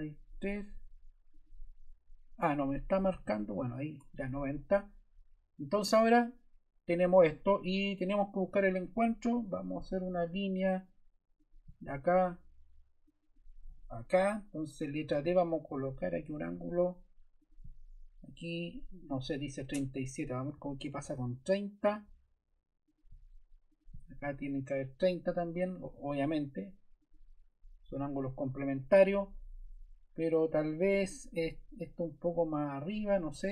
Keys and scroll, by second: 3.0 0, 3.9 Return, 14.2 Escape, 15.1 d, 20.4 0, 21.1 Return, 28.5 Escape.